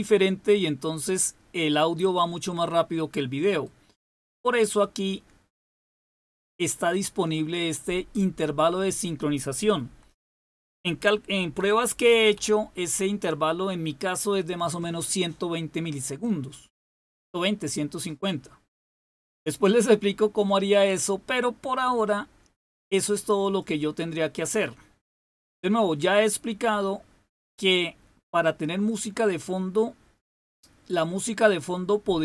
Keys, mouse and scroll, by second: 3.4 right click, 4.8 click, 8.7 click, 10.0 Left, 10.2 Left, 11.5-12.3 typing, 23.4 click, 31.4-32.2 drag.